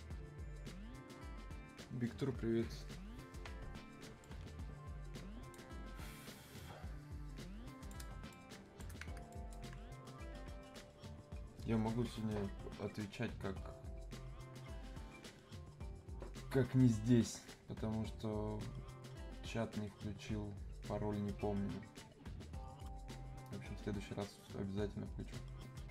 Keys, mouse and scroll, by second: 4.2-8.3 drag, 8.3 shift+click, 9.3 alt+click.